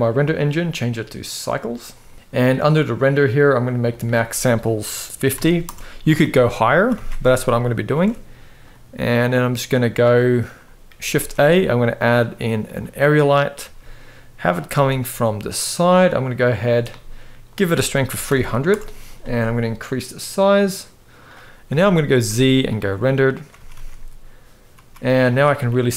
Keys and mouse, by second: 0.2-1.2 drag, 3.6-5.4 drag, 6.5 ctrl+s, 6.7 ctrl+s, 7.6 ctrl+b, 10.8 shift+a, 13.3 g, 14.4 r, 16.2 click, 17.1-18.4 drag, 18.1 0, 19.6-21.0 drag, 21.4 shift+middle click, 21.8 z, 23.3 ctrl+s, 23.4 ctrl+s, 25.4 g.